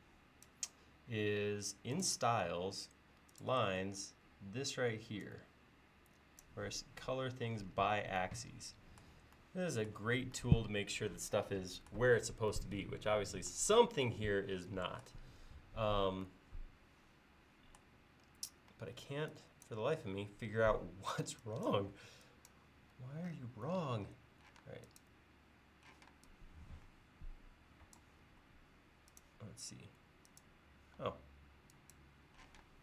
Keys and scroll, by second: 18.7 e, 23.0 l, 24.6 space, 26.0 p, 28.3 l, 31.0 e, 32.5 p.